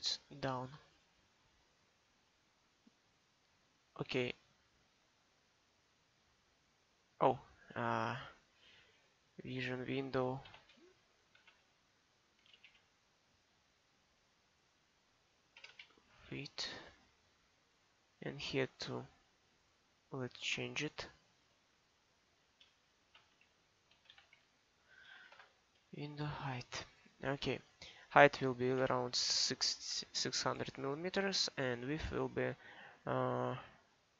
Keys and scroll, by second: 10.5 shift+-, 11.4 w, 12.4 f, 12.6 h, 12.7 t, 15.6 BackSpace, 15.7 d, 23.1-24.3 typing, 25.3 shift+-, 28.8 6, 29.2 0.